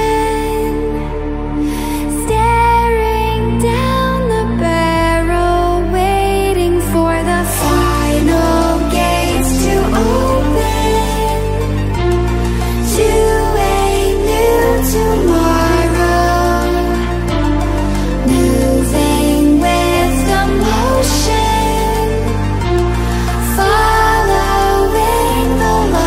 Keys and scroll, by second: 19.2 ctrl+e.